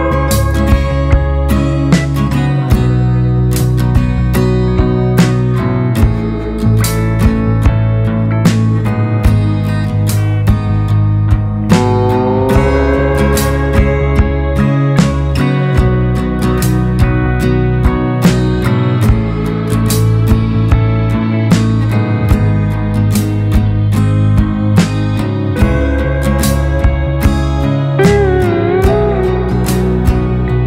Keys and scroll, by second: 0.0 ctrl+space, 1.0 ctrl+space, 10.5 ctrl+space, 11.2 ctrl+space, 27.3 ctrl+space.